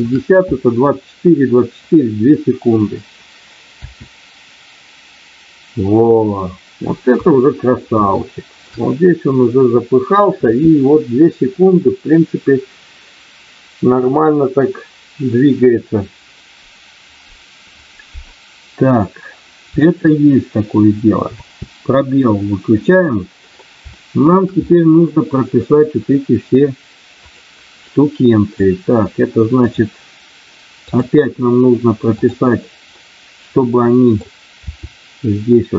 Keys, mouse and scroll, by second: 3.6 space, 7.1 KP_1, 8.0 shift+middle click, 21.4 space, 22.7 click, 23.9 shift+middle click, 24.6 middle click, 27.2 click, 27.7 middle click, 29.6 click, 30.7 click, 32.1 click, 33.0-34.2 middle drag, 34.7 r.